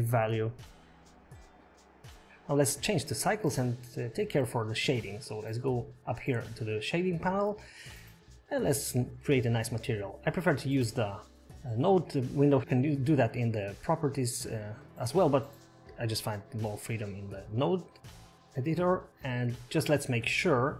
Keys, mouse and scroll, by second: 1.7 click, 2.1-2.6 scroll up 4, 2.6 click, 7.2 click, 7.2-7.5 scroll up 3.